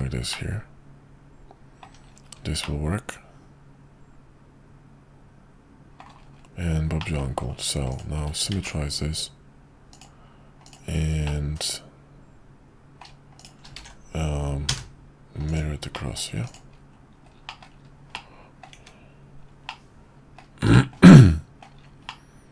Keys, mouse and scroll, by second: 0.3-1.8 middle drag, 2.6-6.0 middle drag, 7.0 middle drag, 7.9 click, 8.5 alt+x, 10.3 click, 10.6 click, 11.2-13.0 middle drag, 13.4 shift+click, 13.8 alt+x, 15.6-15.9 drag, 15.9 middle drag, 16.4 click, 17.5 middle click, 18.1-18.7 middle drag, 18.8 `, 19.7-20.4 middle drag, 20.7 shift+middle drag, 21.2-21.6 middle drag, 22.1-22.5 middle drag.